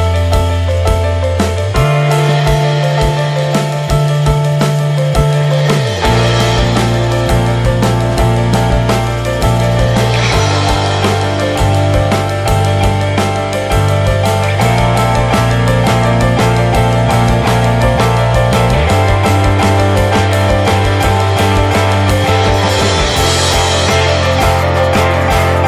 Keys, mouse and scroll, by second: 1.5 shift+d, 3.1 r, 5.8 g, 6.7 r, 7.3 alt+middle click, 8.0-8.9 shift+middle drag, 8.9 r, 11.1 click, 11.8 g, 12.9 drag, 13.2 middle click, 13.3-13.7 scroll up 2, 13.5 shift+middle click, 16.6-18.7 drag, 19.3 middle drag, 19.6 scroll up 3, 19.8-20.5 shift+middle drag, 20.5 click, 20.7 `, 20.9 middle click, 21.3 scroll up 1, 21.4-24.6 middle drag, 24.6-25.2 scroll down 2, 25.2-25.6 middle drag.